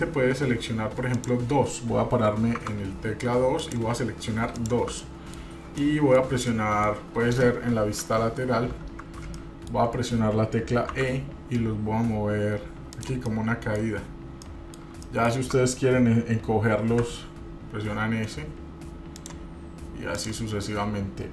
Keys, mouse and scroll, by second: 1.4 click, 2.7 click, 3.8 click, 4.7 shift+click, 5.2 middle click, 6.0 shift+middle click, 6.7 middle click, 8.1 KP_3, 8.7-9.4 scroll up 2, 9.5 shift+middle click, 10.0-10.9 scroll up 2, 11.1 e, 13.4 middle click, 14.0-14.8 scroll down 3, 14.6 middle click, 15.2 shift+middle click, 17.1 s, 20.4 click.